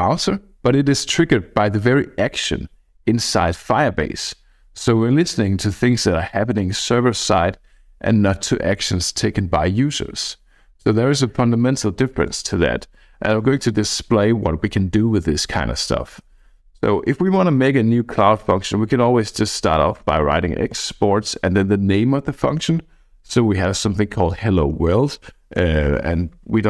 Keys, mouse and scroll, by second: 19.1-20.9 typing, 25.7 Escape.